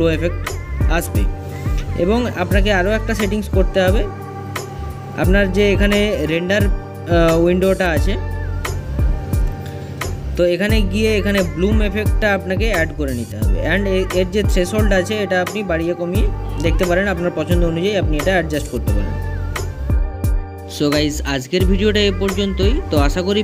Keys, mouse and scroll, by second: 2.3 click, 3.3-11.7 middle drag, 11.7-23.4 drag.